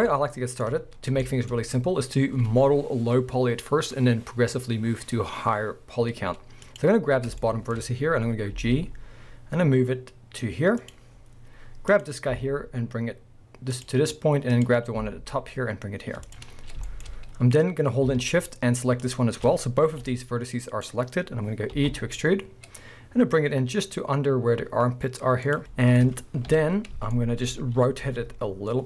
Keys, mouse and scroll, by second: 0.1-0.9 shift+middle drag, 0.9-1.2 scroll down 2, 1.2-6.6 shift+middle drag, 6.6 click, 7.1-7.4 scroll up 2, 7.4-8.5 shift+middle drag, 8.5 g, 8.9-10.1 middle drag, 10.9 click, 11.1-11.9 scroll down 2, 11.9 click, 12.3 g, 13.8 click, 14.5 click, 15.0 g, 16.3 click, 16.5 scroll up 1, 16.9-19.0 shift+middle drag, 17.1 scroll up 1, 19.0 shift+click, 19.9 g, 20.8 right click, 21.8 e, 25.5 click, 25.7-27.4 middle drag, 26.5 KP_1, 27.5-28.0 scroll up 1, 28.0 r.